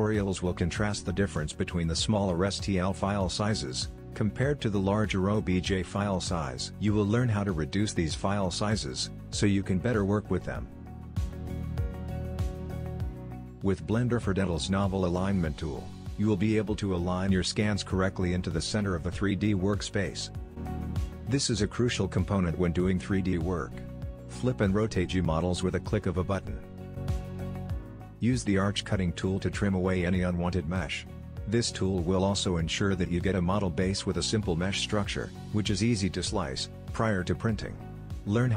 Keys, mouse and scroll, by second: 1.0-2.6 shift+middle drag, 2.9-4.3 middle drag, 2.9 scroll down 1, 4.3-4.6 scroll down 1, 4.6-7.1 middle drag, 4.8 alt+a, 5.5 scroll up 1, 7.1-7.5 scroll up 1, 7.5 middle click, 8.3-11.7 scroll up 1, 11.7-12.4 scroll up 1, 12.0 middle click, 12.4 shift+middle click, 12.9 shift+right click, 13.2 scroll down 1, 13.3-18.6 shift+middle drag, 18.9-19.9 shift+middle drag, 19.9-28.2 drag, 28.3-30.0 shift+middle drag, 29.1 scroll down 1, 29.5 e, 30.7-33.6 middle drag, 32.7 e, 33.6 click, 33.6 scroll down 1, 33.8 e, 34.3 click, 35.2 shift+middle click, 35.6 e, 35.8 click, 36.0 g, 36.2 e, 36.4 shift+click, 36.6 scroll up 1, 37.1-38.5 shift+middle drag.